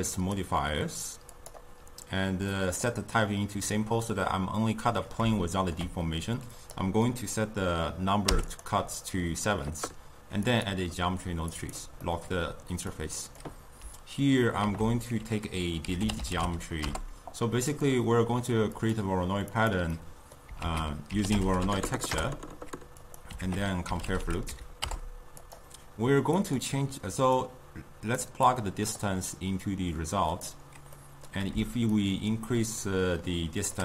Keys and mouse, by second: 1.5-5.5 drag, 5.5-8.6 ctrl+middle drag, 8.6 click, 10.7-17.8 drag, 20.0-28.3 drag, 30.7-31.2 drag, 31.2-32.3 middle drag, 32.3-33.8 shift+drag.